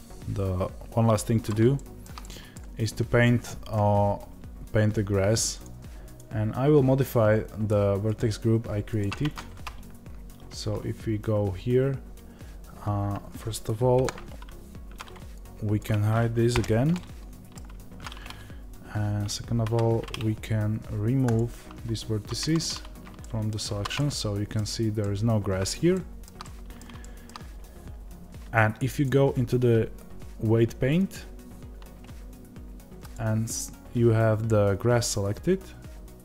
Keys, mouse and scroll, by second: 1.5 scroll down 1, 6.4 click, 10.4 Tab, 13.9 KP_1, 16.9-22.4 middle drag, 18.0 z, 22.4 Tab, 22.4 click, 23.1-31.3 middle drag, 23.7 ctrl+s, 27.4 Tab, 31.3-36.2 drag.